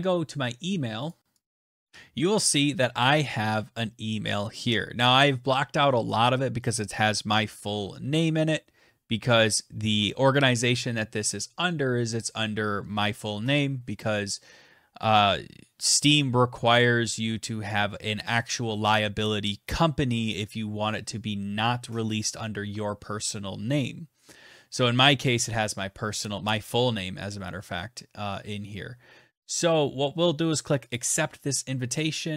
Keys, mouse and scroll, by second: 0.6 click, 0.9 click, 1.1 click, 1.5 f, 1.6 click, 30.5 click.